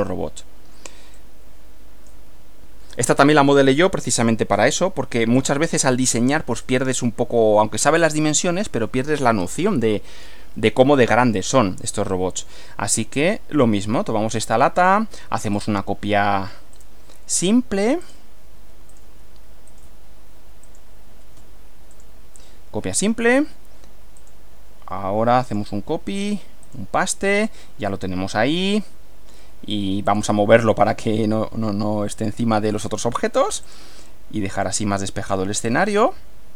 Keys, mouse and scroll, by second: 1.2 click, 4.2 click, 5.4 click, 6.6 click, 8.1-10.4 middle drag, 11.1 click, 14.8 click, 15.6 click, 16.8 click, 18.0 click, 18.9 click, 19.7 click, 20.6 click, 21.9 click, 24.2 click, 25.5 click, 26.6 click, 27.9-29.5 middle drag, 30.1 click, 32.2 click, 33.7 click, 34.6 click.